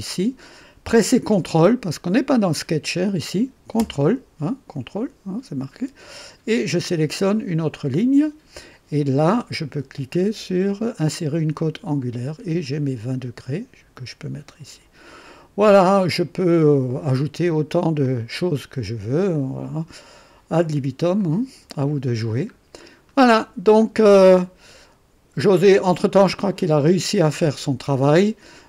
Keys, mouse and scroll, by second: 7.6 ctrl+click, 11.5 click, 13.3-14.9 drag, 18.0 click, 19.3 click, 21.2 click, 22.5-23.0 scroll down 1, 23.6 scroll down 1.